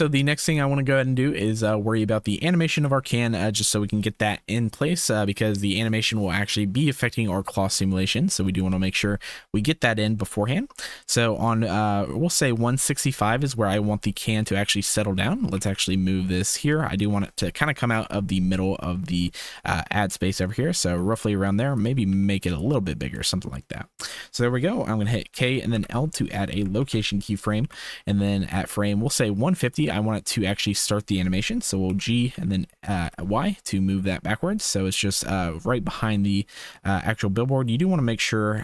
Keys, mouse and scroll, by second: 0.2 z, 2.7 n, 8.1-8.4 shift+middle drag, 8.7 ctrl+s, 10.1 shift+middle click, 11.4 click, 13.5 shift+middle click, 14.4 click, 15.5 g, 16.7-17.0 drag, 18.6 click, 20.5 click, 21.2 s, 21.9 g, 23.2 click, 25.3 k, 26.8 ctrl+s, 27.6 KP_0, 29.0 click, 31.8 g, 35.0 shift+click, 36.3-36.7 drag.